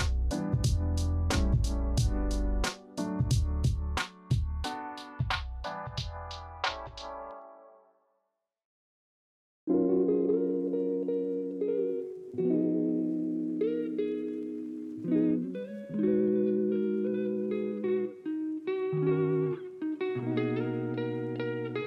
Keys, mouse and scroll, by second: 7.5 alt+Tab, 11.3 ctrl+z, 11.8 ctrl+alt+2.